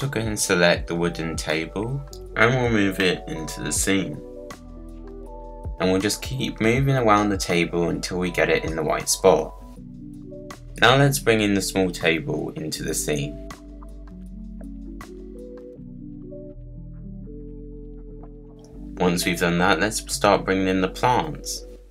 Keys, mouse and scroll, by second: 0.7 middle click, 0.9-1.3 scroll down 6, 1.4 middle click, 1.9 scroll up 2, 2.0 middle click, 2.7 click, 4.5 click, 4.8 click, 4.9 middle click, 5.1 KP_Decimal, 5.2 scroll down 1, 5.5 click, 6.2 click, 7.6 click, 9.6 click, 11.2-11.7 scroll down 7, 12.2 click, 13.1 click, 14.1 click, 14.5 click, 14.8 KP_Decimal, 14.9 middle click, 15.2-15.5 scroll down 2, 15.3 click, 16.0 middle click, 16.4-17.4 drag, 17.4 middle click, 17.6 click, 18.2 click, 18.3 scroll down 5, 18.4-21.9 middle drag.